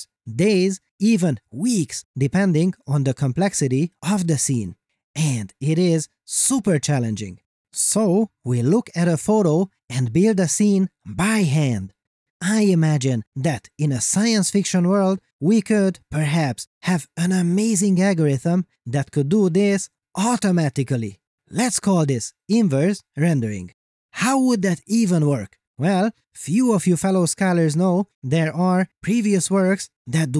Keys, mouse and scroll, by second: 0.0 click.